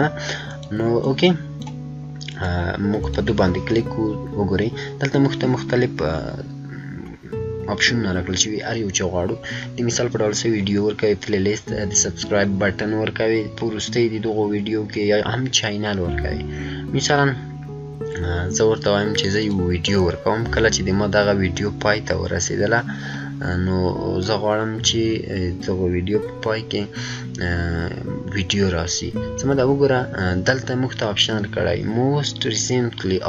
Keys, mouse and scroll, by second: 19.3 click, 19.4 click, 23.3 click, 23.4 scroll up 1.